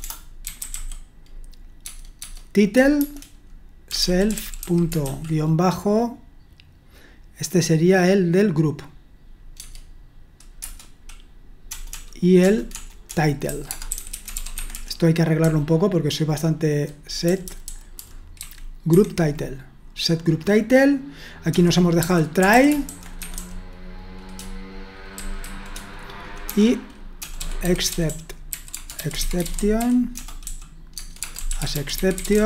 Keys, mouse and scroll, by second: 0.0-1.2 typing, 1.8 Tab, 3.0-5.5 typing, 10.6 typing, 11.7-18.8 typing, 18.9 Escape, 22.2-23.8 typing, 25.2-32.4 typing.